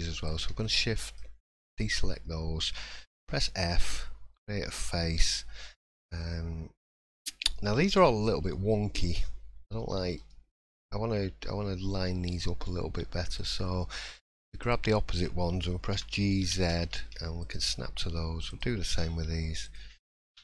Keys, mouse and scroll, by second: 0.2 shift+click, 1.6 middle click, 3.2 f, 5.3 middle click, 5.7-6.2 scroll up 1, 6.2 middle click, 7.9 1, 8.4 middle click, 9.8 shift+middle click, 10.3 middle click, 13.3 click, 14.6 shift+click, 15.9 g, 18.5 click, 19.6 shift+click, 20.3 g.